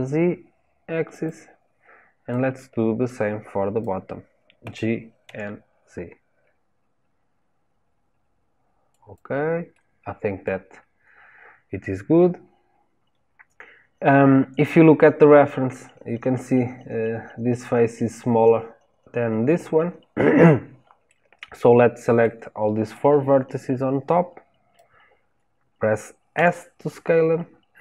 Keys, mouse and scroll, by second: 2.3 click, 4.6 g, 9.7-10.7 middle drag, 10.7 scroll down 2, 21.0-22.9 middle drag, 22.9 click.